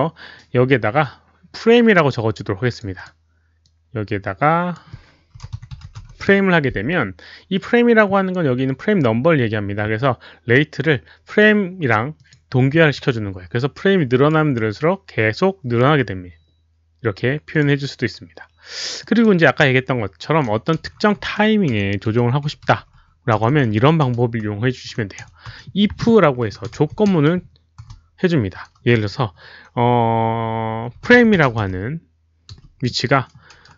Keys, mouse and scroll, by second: 1.9 click, 2.9 click, 3.6-4.7 drag, 5.1-6.7 typing, 6.2 click, 12.1 click, 14.1 click, 17.5 click, 19.0 click, 20.8 Left, 21.5 Left, 22.4 Delete, 22.4 Left, 22.4 click, 23.2 Delete, 23.2 Left, 23.2 click, 28.9 space, 30.7-31.9 typing.